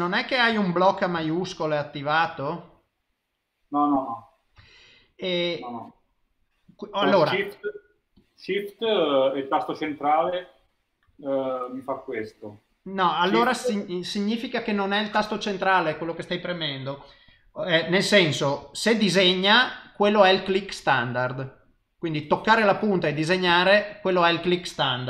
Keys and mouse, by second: 0.6 middle click, 0.9 shift+middle click, 1.2 shift+click, 5.5 shift+middle click, 7.1 click, 10.0 shift+click, 11.0 shift+click, 12.2 middle click.